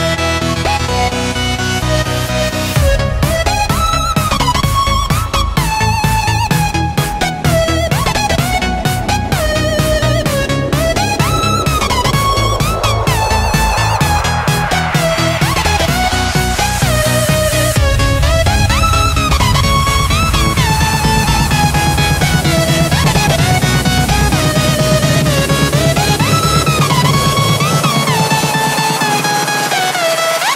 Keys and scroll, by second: 2.8 v, 4.1 g, 5.7-6.7 typing, 9.9 v, 10.9 a, 13.2 v, 14.0 a, 17.4 v, 19.0 v, 21.2 shift+super+[, 21.5 super+], 24.5 Tab, 24.9 space, 30.3-30.5 typing.